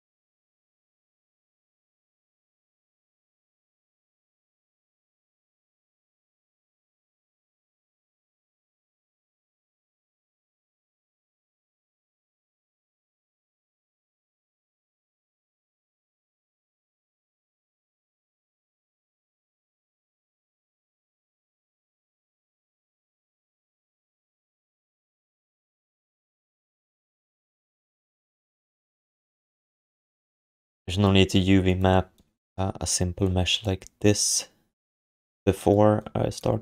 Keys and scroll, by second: 4.8 q, 5.9 ctrl+s, 16.1 alt+shift+d, 16.4 ctrl+s, 17.3-18.5 typing, 20.3 ctrl+shift+d, 23.0 alt+shift+d, 23.3 ctrl+s.